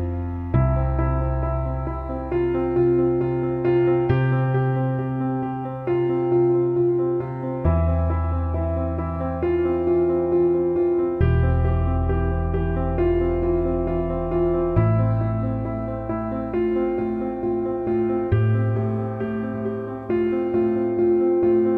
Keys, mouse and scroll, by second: 5.2 right click, 5.3 click, 8.6 Down, 10.6 Up, 10.8 Down, 11.4-15.9 drag, 17.2 click, 18.5 ctrl+z, 18.9 shift+click, 20.0-20.6 scroll down 1, 20.7-21.7 drag.